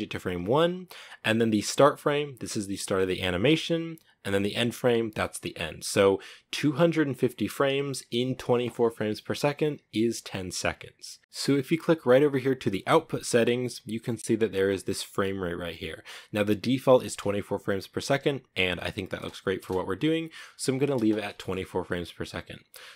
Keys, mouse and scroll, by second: 11.2-20.0 drag, 20.0 space, 20.1 space, 20.7 shift+middle click, 21.3 scroll down 2.